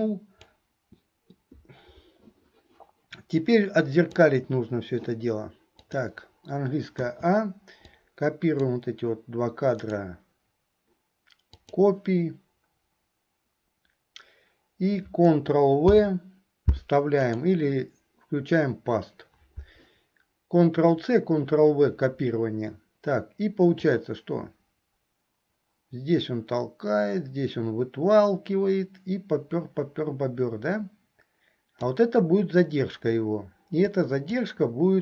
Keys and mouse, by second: 3.4 click, 5.9 click, 8.1 click, 9.9-11.8 drag, 16.1 ctrl+v, 17.4-19.9 right drag, 24.0-32.1 right drag, 33.9 right click.